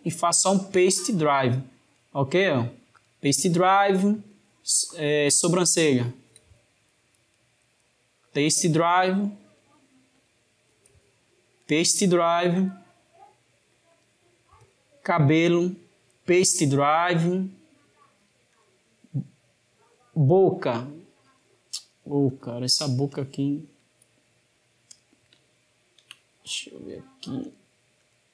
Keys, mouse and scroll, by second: 0.3 click, 1.8-4.0 right drag, 4.0 drag, 5.4 click, 7.2-9.3 right drag, 9.3 click, 10.0 click, 11.4-13.8 right drag, 13.8 drag, 15.4-17.6 right drag, 17.6 click, 18.4 click, 19.7 click, 20.4 click, 21.0 click, 21.5 click, 22.0 click, 23.0 click, 24.7 drag, 25.3-26.6 ctrl+middle drag, 26.6 click, 27.2 click, 27.8 click.